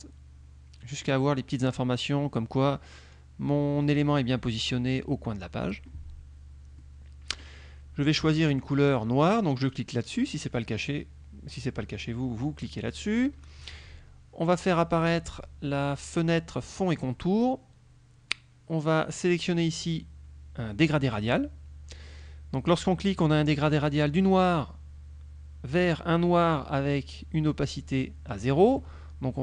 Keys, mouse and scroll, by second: 6.9 middle click, 9.8 click, 13.0 click, 14.7 click, 15.2 click, 17.0 click, 21.1 click, 24.2 click, 25.8 click.